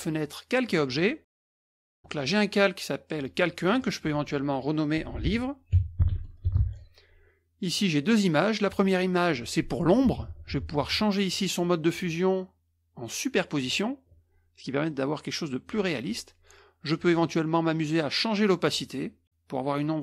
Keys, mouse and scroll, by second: 0.7 click, 1.7 click, 3.7 click, 5.2-6.7 typing, 7.6 click, 8.6 click, 11.2 click, 13.6 click, 17.3-20.0 drag.